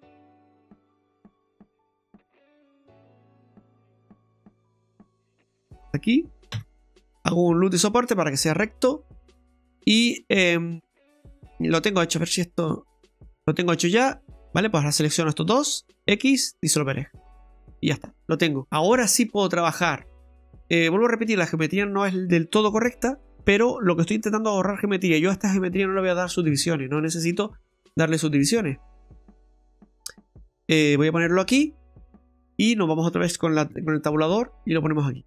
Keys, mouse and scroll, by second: 7.2-7.6 scroll up 1, 7.8 scroll down 1, 9.9 middle click, 13.5 shift+middle click, 14.2 ctrl+z, 15.3 shift+right click, 16.1 x, 17.8-18.3 scroll down 3, 18.2 middle click, 18.8 right click, 20.0 click, 20.9 right click, 21.1 middle click, 21.9 scroll up 1, 22.5 e, 27.1 scroll down 2, 27.3 middle click, 28.0-28.3 scroll down 1, 28.3 middle click, 29.0 middle click, 29.5 middle click, 30.9 Tab, 31.2-31.6 scroll down 3, 31.6 middle click, 34.3-34.8 scroll down 4, 34.8 middle click.